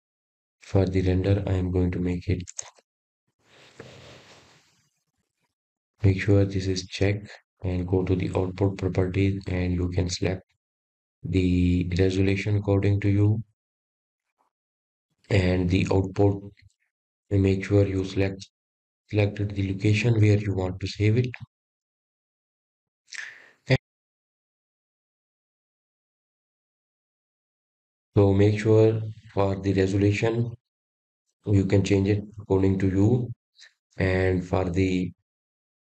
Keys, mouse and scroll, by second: 3.8-7.0 drag, 7.6 KP_0, 9.9-12.4 scroll down 4, 12.8 click, 14.4-17.6 scroll up 6, 18.0-19.2 scroll down 3, 19.2-22.4 scroll down 7, 30.2-32.3 scroll up 9, 32.3-33.7 scroll up 7.